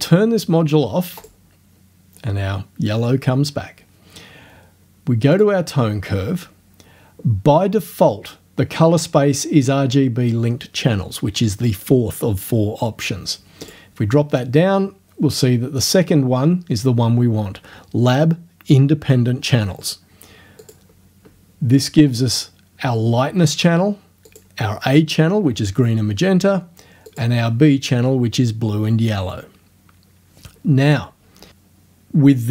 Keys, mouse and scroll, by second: 1.2 click, 5.4 click, 13.6 click, 20.6 click, 24.3 click, 27.1 click.